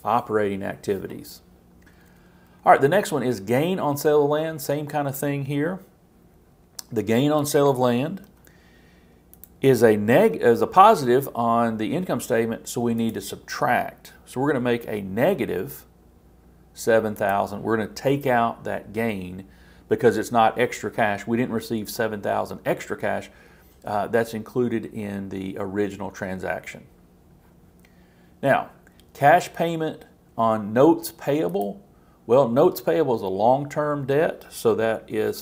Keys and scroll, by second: 8.2 super+c, 10.1 super+v.